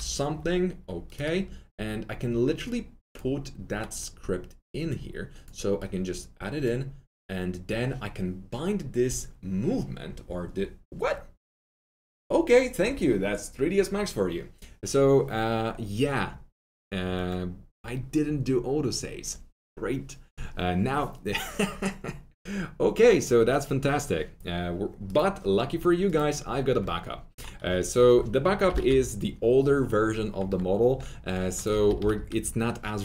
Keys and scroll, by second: 0.0-0.3 typing, 26.5-27.2 typing, 28.4-29.2 typing, 31.6-32.4 typing.